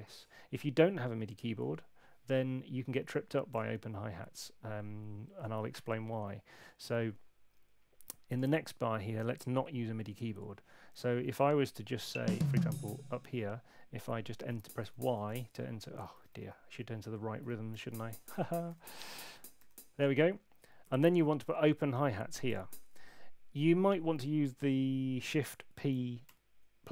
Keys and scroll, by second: 1.6 Escape, 12.0 Up, 14.4 Up, 16.0 super+z, 16.1 super+z, 16.3 super+z, 17.4 5, 17.7 y, 26.2 shift+p.